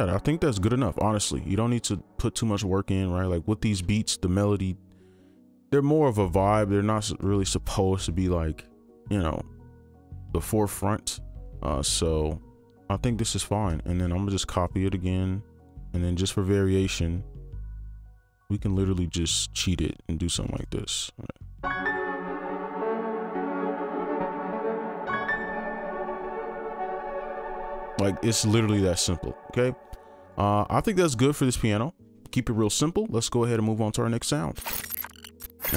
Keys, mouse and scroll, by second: 5.7 ctrl+click, 9.0 shift+click, 10.7 right click, 13.9 ctrl+a, 15.2 shift+click, 18.2 right click, 18.5 ctrl+click, 20.5 right click, 21.4 space, 22.2 right click, 27.4 space, 30.4 double click.